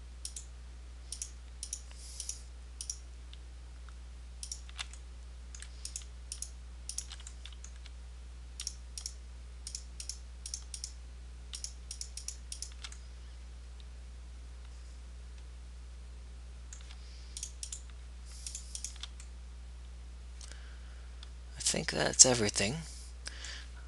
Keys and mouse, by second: 14.2 middle click, 19.4-20.4 right drag, 20.4 middle click.